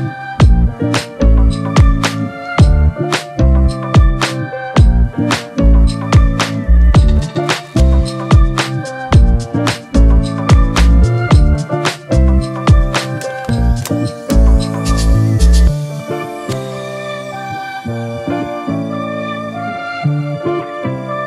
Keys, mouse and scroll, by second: 1.2 double click.